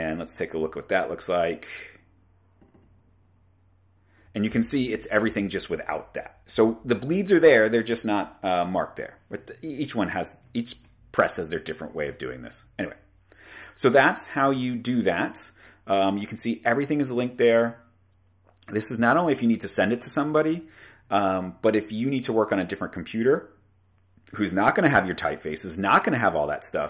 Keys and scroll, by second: 0.2 super+Tab, 4.5 super+0, 8.3 Right, 10.8 super+w, 12.2 super+w.